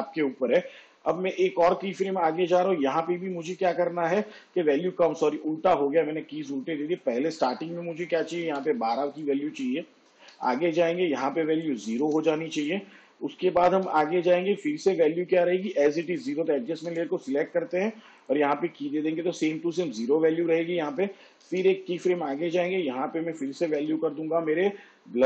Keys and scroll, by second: 1.3 k, 8.6 1, 10.4 k, 12.1 0, 14.0 k, 17.0 u, 21.6 k, 23.6 1, 23.9 2.